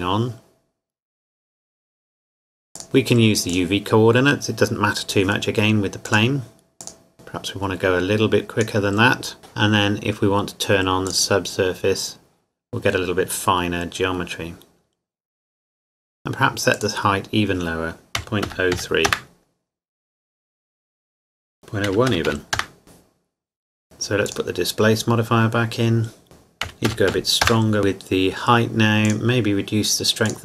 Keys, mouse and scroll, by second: 2.8 click, 6.1 click, 11.1 click, 16.8-18.2 drag, 18.2 KP_Decimal, 18.4 KP_0, 18.8 KP_3, 19.1 KP_Enter, 21.6 click, 21.9 KP_Decimal, 22.1 KP_0, 22.3 KP_1, 22.6 KP_Enter, 24.3 click, 26.6 KP_Decimal, 26.9 KP_0, 27.1 KP_2, 27.4 KP_Enter, 29.0 click.